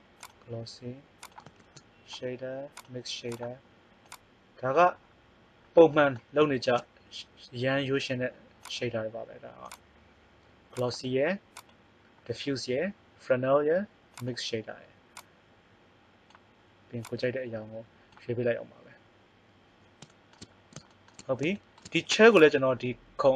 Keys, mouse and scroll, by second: 1.5 shift+a, 2.8 shift+a, 6.5 shift+a, 11.5-18.1 drag, 20.6 middle click.